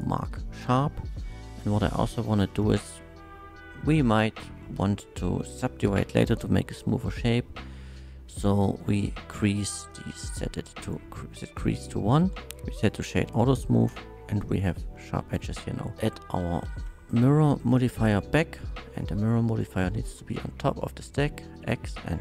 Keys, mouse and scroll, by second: 2.5 n, 5.1 n, 9.9-10.9 drag, 11.5 click, 12.3 Tab, 12.8 click, 13.8-14.3 middle drag, 14.9 middle drag, 16.5 m, 16.7 i, 17.2 i, 17.2 r, 17.8 click, 19.0-20.1 drag, 21.9 click.